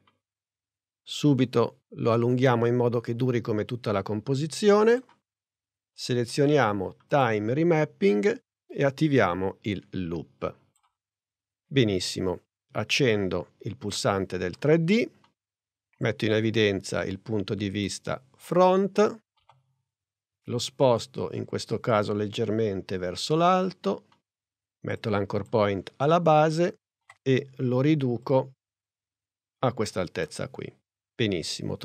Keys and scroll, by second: 19.4 p, 27.0 s.